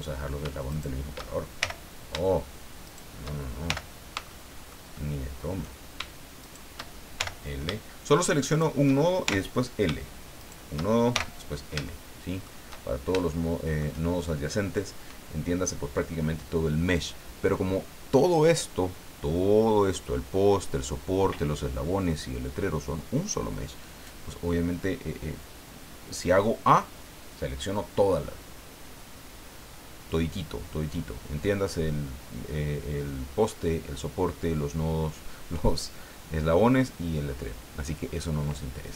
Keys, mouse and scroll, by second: 0.7 shift+right click, 1.6 shift+l, 2.8 shift+right click, 3.6 shift+l, 4.3 shift+middle click, 6.4 shift+right click, 7.2 shift+l, 8.4 shift+right click, 9.2 shift+l, 10.4 shift+right click, 11.1 shift+l, 11.9 shift+middle click, 12.8-13.1 shift+scroll down 2, 13.3 shift+middle click.